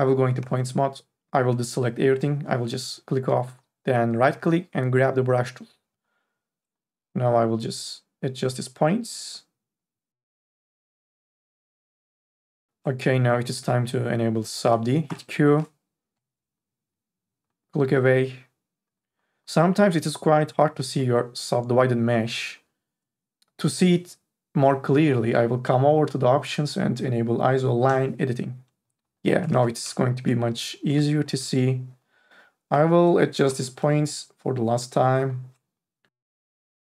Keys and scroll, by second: 0.4 1, 15.1 q, 29.8 ctrl+z.